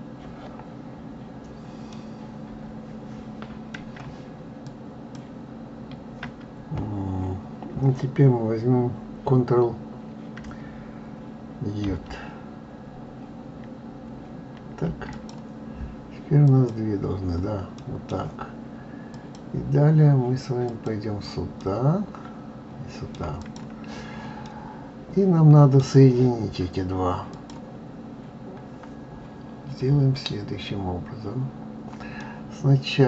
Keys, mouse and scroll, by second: 1.9-4.6 middle drag, 4.6 shift+click, 11.9 ctrl+j, 14.5 ctrl+j, 15.1 click, 16.4 click, 17.7-19.1 middle drag, 19.1-21.5 drag, 21.5-23.3 middle drag, 23.3 click, 24.4-27.3 middle drag, 27.3 click, 27.9-28.7 scroll up 4, 32.1 middle click.